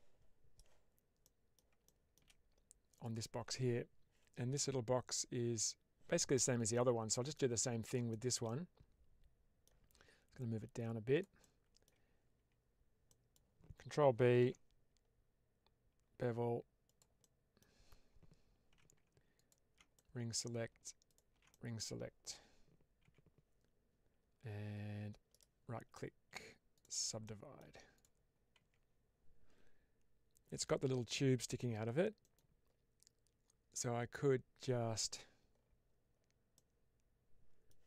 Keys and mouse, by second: 1.1-1.4 middle drag, 1.8 shift+middle drag, 6.6-7.2 middle drag, 8.1 shift+middle click, 8.3-9.6 middle drag, 10.3 click, 11.3-11.7 middle drag, 12.2 Tab, 13.0 middle click, 14.3 ctrl+b, 16.7 click, 17.1 middle click, 18.6 2, 19.3 ctrl+alt+click, 19.8 middle click, 20.4 ctrl+alt+click, 21.4 middle click, 22.9 q, 25.2-26.7 right drag, 27.1 middle click, 27.9 click, 28.5 Tab, 36.5-37.6 middle drag.